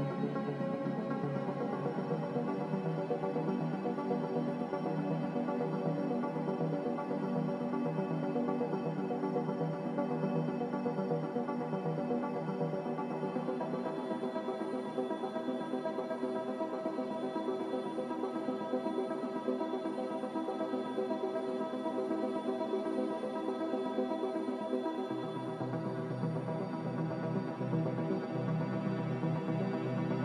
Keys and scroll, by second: 13.8 ctrl+z.